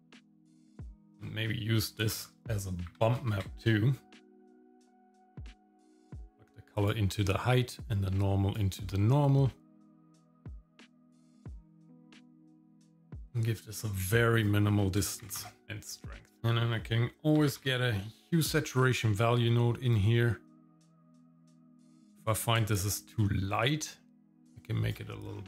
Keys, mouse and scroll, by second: 0.0 shift+middle click, 0.2 shift+middle click, 0.7 scroll up 2, 1.0 middle click, 1.3 shift+a, 2.1 shift+a, 6.1 click, 7.8-8.8 drag, 10.0 scroll up 2, 11.5-13.2 drag, 12.6 KP_0, 14.4-15.4 drag, 16.0 shift+middle click, 16.4-16.7 scroll up 2, 16.4 shift+a, 21.5-24.9 drag, 25.3-25.4 scroll up 2.